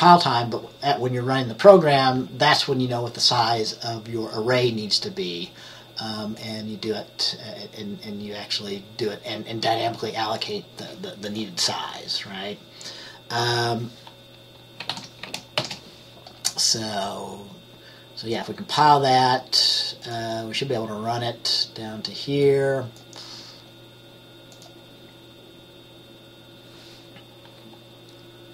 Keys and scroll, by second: 15.0 ctrl+s, 15.7 ctrl+b.